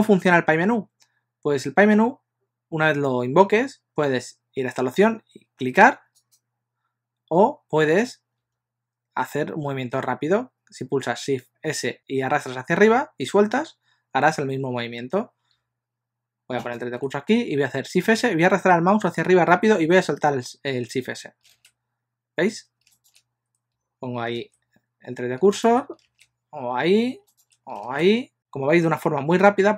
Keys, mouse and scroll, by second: 12.8 shift+s, 16.7 shift+right click, 21.6 shift+s, 23.0 shift+right click, 24.5 shift+s, 25.6 shift+right click, 26.1 shift+s, 27.3 shift+right click, 28.1 shift+s.